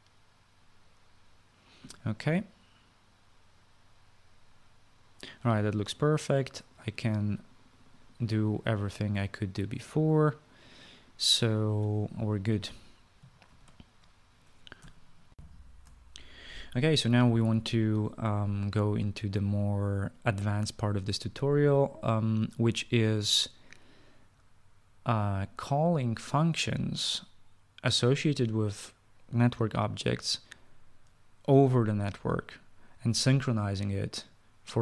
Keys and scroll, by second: 14.2 ctrl+s, 16.1 shift+F9, 16.1 shift+F9.